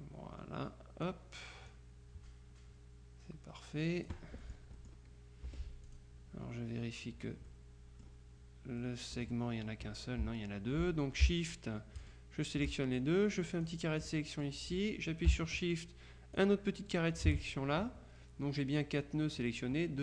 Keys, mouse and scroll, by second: 1.8-5.4 drag, 5.5 F2, 5.9 click, 7.6-8.6 drag, 8.8 click, 12.1 click, 13.1-14.2 drag, 15.8-16.9 shift+drag.